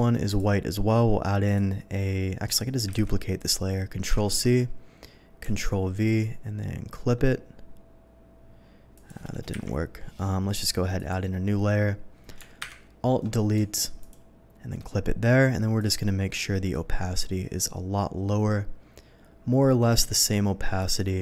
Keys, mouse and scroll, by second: 0.3 click, 1.4 click, 2.4 click, 3.0 ctrl+c, 3.3 click, 4.0 ctrl+v, 6.0 alt+click, 8.9 alt+click, 9.5 Delete, 10.9 click, 13.5 alt+Delete, 14.0 click, 15.7 alt+click, 16.4-20.8 alt+drag.